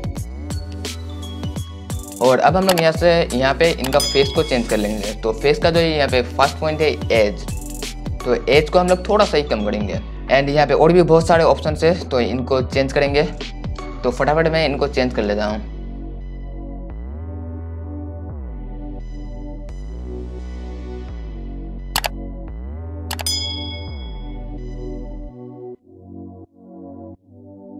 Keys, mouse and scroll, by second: 1.7 right click, 20.9 right click, 21.9-27.7 drag.